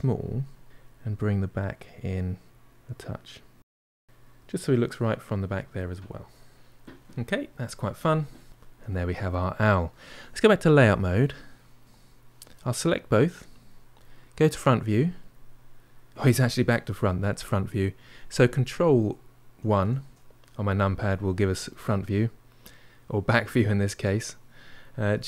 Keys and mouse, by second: 0.3-1.5 middle drag, 1.5-2.5 drag, 2.5-3.7 middle drag, 3.7 f, 3.9 middle click, 4.6-5.6 drag, 5.6-8.1 middle drag, 8.4-11.4 shift+middle drag, 11.4 click, 11.8-13.5 middle drag, 13.5 click, 14.4 KP_1, 19.6 ctrl+KP_1, 25.1 g.